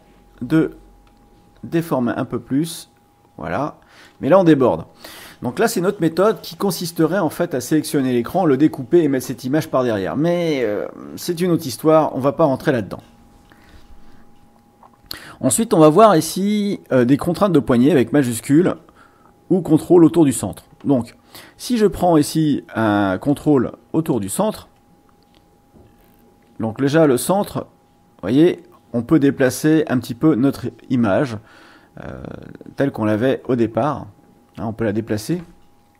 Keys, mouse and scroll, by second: 10.4 click, 23.2 click, 24.1 click, 27.0-35.5 drag.